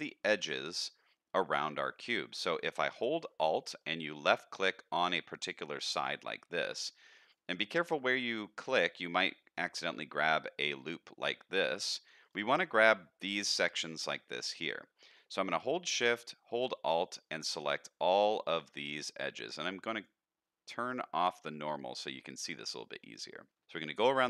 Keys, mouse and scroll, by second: 0.6 middle click, 1.8 middle click, 2.4 shift+middle click, 3.8 alt+middle click, 4.4 alt+click, 7.2 alt+click, 12.2 alt+click, 14.6 middle click, 15.3 shift+middle click, 16.8 alt+shift+click, 17.6 alt+shift+click, 18.4 alt+shift+click, 18.8 middle click, 19.9-21.6 drag, 21.9 middle click, 22.6 shift+middle click, 23.1 middle click, 23.6 middle click, 23.6 alt+shift+click, 24.2 alt+shift+click.